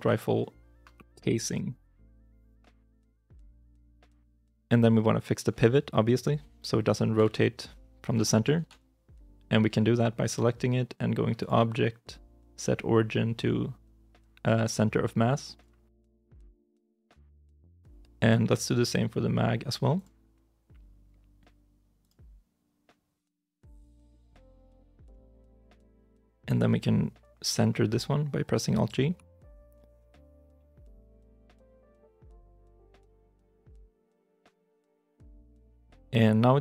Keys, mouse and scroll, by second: 1.4-2.0 typing, 2.4 Return, 3.8 scroll down 1, 4.3 middle click, 8.0 r, 8.4 ctrl+z, 17.1 shift+middle click, 18.4 right click, 23.4 middle click, 26.3 right click, 33.6 right click, 34.5 shift+middle click, 34.8 scroll down 1, 35.6 ctrl+s.